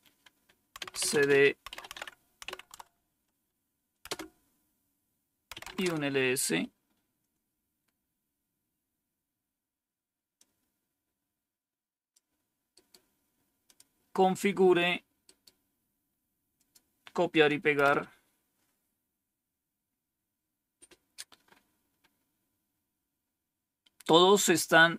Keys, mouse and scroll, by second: 0.4-2.8 typing, 4.0 Return, 4.0 typing, 5.2-5.9 typing, 8.7-9.4 scroll down 1, 10.3-12.1 drag, 12.6 right click, 13.6 click, 15.2 right click, 16.5 click, 17.7 Return, 22.7 scroll down 1, 23.2-23.5 scroll up 1.